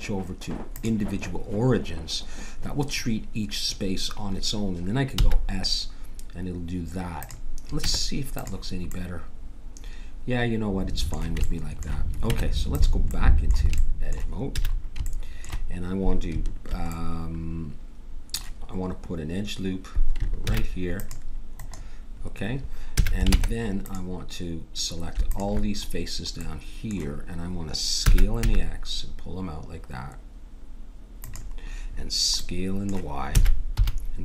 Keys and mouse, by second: 5.1 s, 7.8 Tab, 10.9 middle click, 12.3 Tab, 14.5 a, 20.4 ctrl+r, 22.9 a, 23.3 ctrl+Tab, 25.2-26.7 drag, 26.7 middle click, 27.1 click, 28.0 s, 32.4 middle click, 33.3 s.